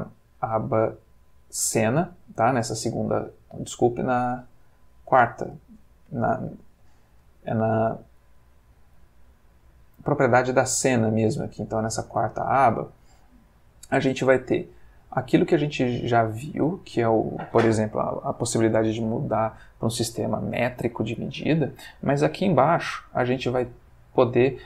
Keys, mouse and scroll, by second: 0.3 click, 4.0 click, 4.7 click, 14.7 click, 22.1 click, 22.9 Escape, 24.3 click.